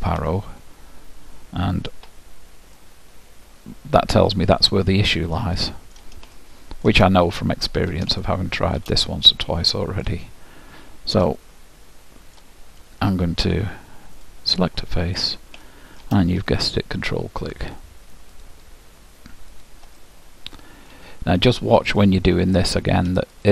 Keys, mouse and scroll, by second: 2.0 KP_Decimal, 2.9-4.7 middle drag, 6.5-11.1 middle drag, 11.4-13.2 middle drag, 14.3-17.2 drag, 15.7-18.5 middle drag, 18.5-21.4 drag, 20.1-21.9 middle drag, 22.1-23.5 drag.